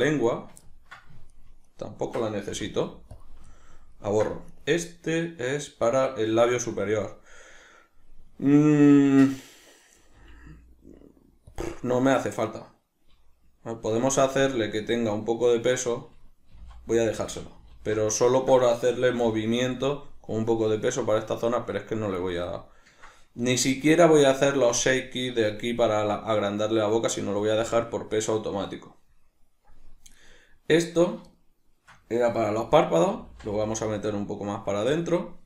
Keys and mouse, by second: 0.3 right click, 0.7 ctrl+middle click, 1.3 shift+right click, 1.7 shift+right click, 2.5 x, 3.5-4.5 ctrl+middle drag, 4.5 right click, 11.6 click, 14.2 alt+q, 15.0-17.2 ctrl+middle drag, 16.5 g, 17.2 click, 17.7 alt+q, 18.2-19.7 ctrl+middle drag, 19.2 g, 19.7 click, 22.3-30.2 ctrl+middle drag, 23.7 alt+q, 30.2 right click, 31.4-33.1 shift+middle drag, 33.1 g, 34.1 middle click, 35.1-35.4 drag.